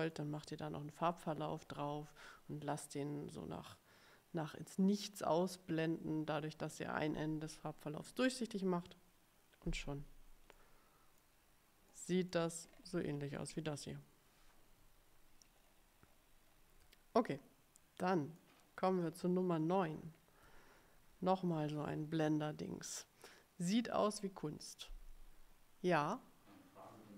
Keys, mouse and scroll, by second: 10.6 middle click, 12.0 middle click, 12.8-13.4 ctrl+scroll up 4, 15.6-16.8 ctrl+scroll down 5, 17.4-18.7 middle drag, 19.8-20.4 ctrl+scroll up 1.